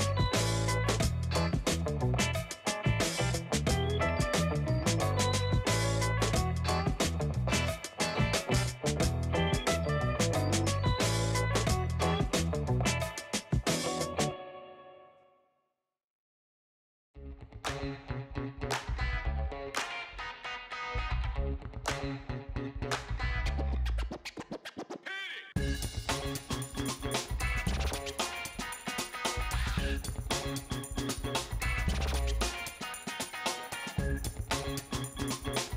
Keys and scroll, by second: 12.3 space, 26.5 alt+shift+space.